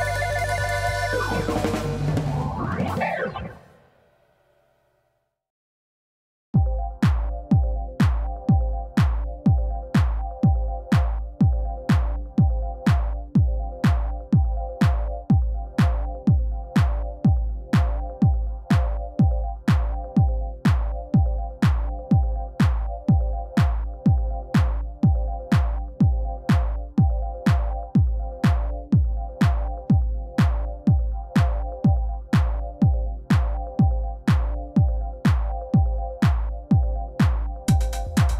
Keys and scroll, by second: 0.1 8, 0.3 d, 0.4 Return, 2.6 3, 2.9 Return, 4.3 r, 4.5 y, 8.7 g, 18.1 alt+a, 22.5 \, 36.5 shift+a, 37.3 g, 37.5 shift+z.